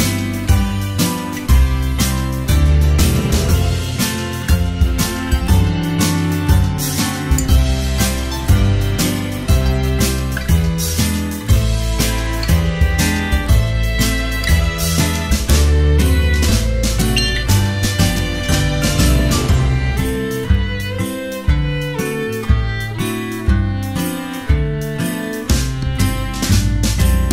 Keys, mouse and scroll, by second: 1.1-6.2 typing, 8.0-9.7 typing, 10.9 space, 20.2 ctrl+z, 20.5 space, 21.7 space, 22.0 space, 23.3 space, 24.5 space, 27.0-27.3 typing.